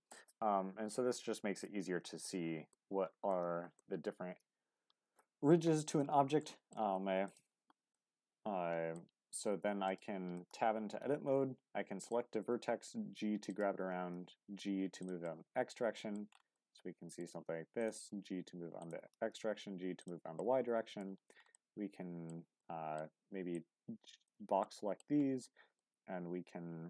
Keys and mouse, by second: 0.2-2.7 middle drag, 3.3 middle click, 6.4 middle click, 6.8 Tab, 7.9-8.9 middle drag, 9.2 g, 10.4-12.1 middle drag, 13.7 g, 14.0 x, 15.0 click, 15.2 middle click, 16.5 middle click, 17.8 click, 18.3 x, 18.8 click, 19.0 g, 19.2 y, 20.0 click, 20.4 middle click, 21.5 middle click, 22.6 middle click, 23.5 click, 24.6 middle click, 25.4 middle click, 26.6 r.